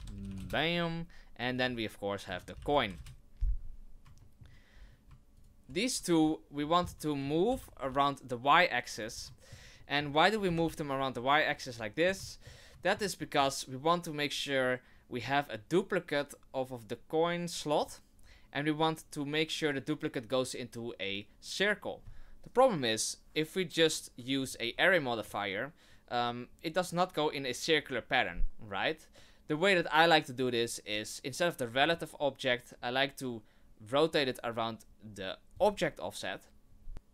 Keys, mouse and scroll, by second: 1.4 click, 1.5 click, 4.2 shift+middle click, 4.7-5.0 scroll down 4, 5.3 shift+right click, 6.6-7.1 scroll down 2, 6.9 middle click, 7.5 g, 9.1 scroll down 2, 9.3 shift+middle click, 9.8 middle click, 10.4 g, 11.7 middle click, 12.2 shift+middle click, 12.8 middle click, 13.2 middle click, 17.8 click, 23.8 click, 24.4 click, 31.8 click, 35.5 click, 36.9 shift+middle click, 36.9 scroll up 2.